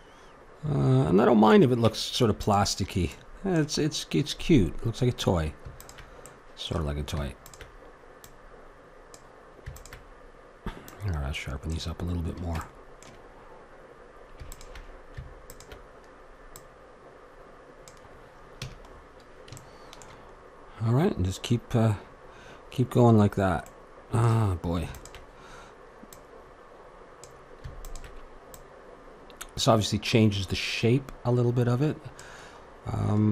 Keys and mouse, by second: 1.9 Tab, 3.1 click, 5.0 middle click, 5.8-13.8 drag, 13.8 middle click, 14.5-18.3 drag, 18.6 a, 18.9-24.9 middle drag, 24.9-32.7 drag, 32.7-33.3 middle drag.